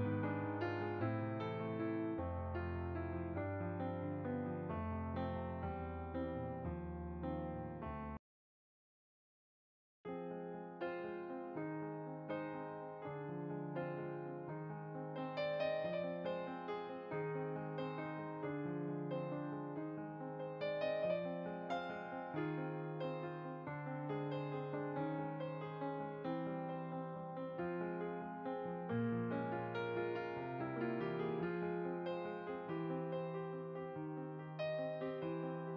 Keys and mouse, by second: 0.6 g, 1.4 click, 1.9 s, 3.1 click, 5.5 g, 7.2 click, 8.3 g, 8.4 click, 12.6 g, 13.4 click, 14.7 click, 15.1 g, 16.9 Tab, 17.4 click, 18.4 middle click, 22.4 click, 23.7 click, 25.2 click, 33.9 click, 34.9 shift+a.